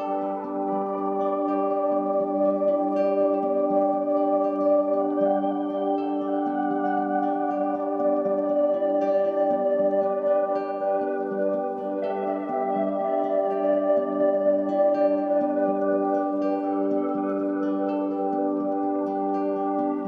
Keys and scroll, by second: 11.2 ctrl+d.